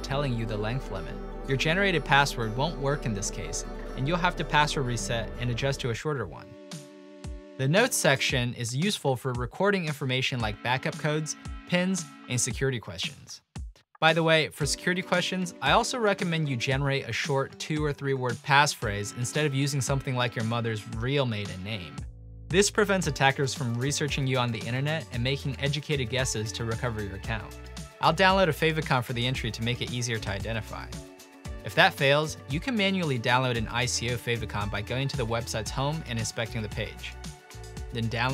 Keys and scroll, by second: 12.7 typing, 14.0 BackSpace, 15.2 BackSpace, 17.0 BackSpace, 17.7 BackSpace, 17.9 ., 19.8 ctrl+a, 20.0 ctrl+c, 21.5-24.9 typing, 25.8 ctrl+v, 31.0 Return, 31.0-32.2 typing, 34.2 typing, 35.3-35.6 typing, 36.6 ctrl+e.